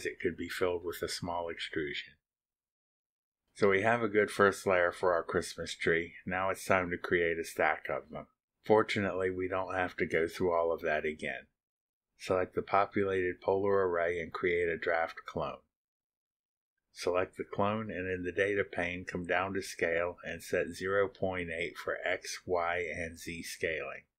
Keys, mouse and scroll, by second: 0.4-2.4 scroll up 1, 3.0 scroll down 1, 3.3 scroll up 1, 4.8 scroll down 1, 12.3 click, 15.3 click, 17.0-17.3 scroll down 2, 18.2 click, 18.6 middle click, 18.9 click, 19.5-24.1 typing, 21.2 Tab, 23.8 Tab.